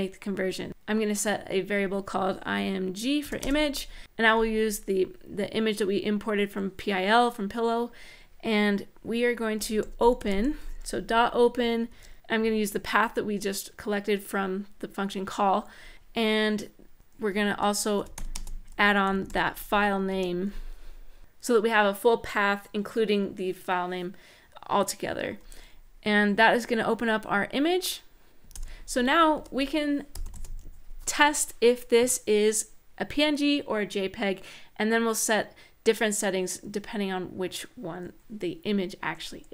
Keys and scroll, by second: 3.0 typing, 9.1-10.5 typing, 11.6 shift+9, 17.8-19.5 typing, 19.9 Return, 28.3 super+Return, 29.1 Return, 29.6-30.5 typing.